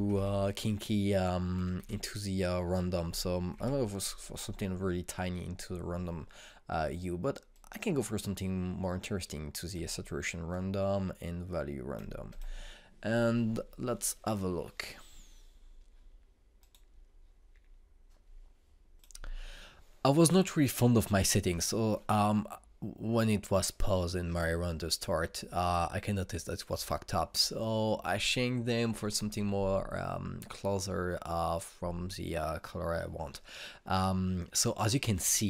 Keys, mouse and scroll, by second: 8.2-12.9 drag, 17.2 click, 19.9 click.